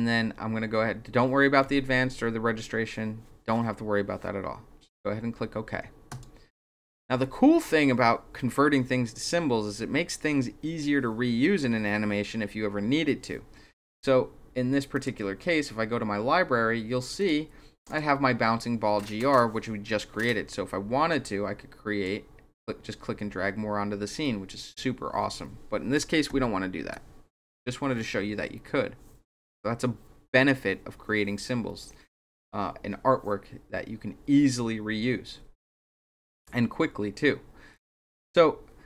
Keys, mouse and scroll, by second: 6.1 click, 14.9 click, 17.2 click, 17.8 click, 21.2 click, 26.3 ctrl+z, 35.4 scroll down 2, 36.2 scroll down 2, 37.7 click.